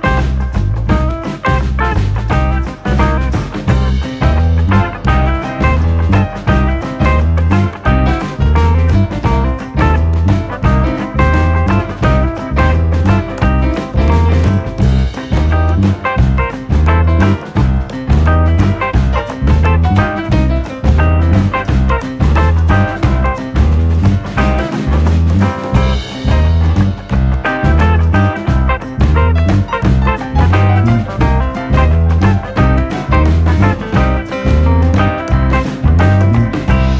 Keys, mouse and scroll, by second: 2.7-4.2 drag, 4.5-5.5 drag, 6.2 click, 6.5 click, 7.1 Delete, 7.9 a, 8.3 s, 9.9-10.7 scroll down 2, 10.7 ctrl+t, 11.8-13.6 middle drag, 13.6 click, 14.0 click, 14.2 scroll up 2, 14.4 shift+middle click, 14.9 click, 15.1 click, 15.5-16.3 drag, 16.3 middle click, 16.7 click, 18.6 KP_3, 18.9 scroll up 1, 19.1 click, 20.1 scroll down 2, 20.3-21.3 middle drag, 21.6 Tab, 21.8 click, 22.4-23.0 middle drag, 23.0 click, 23.2 KP_1, 23.5-23.8 scroll up 2, 23.8-24.2 scroll down 1, 24.8 drag, 25.9 click, 27.2 click, 28.1 drag, 28.7-29.8 drag, 30.3-31.1 middle drag, 31.1 scroll up 1, 31.3-31.6 scroll down 1, 32.2-33.7 drag, 34.4 click, 34.5 scroll down 1, 34.6-35.5 middle drag, 35.5-36.1 scroll up 2, 36.1-36.9 shift+middle drag.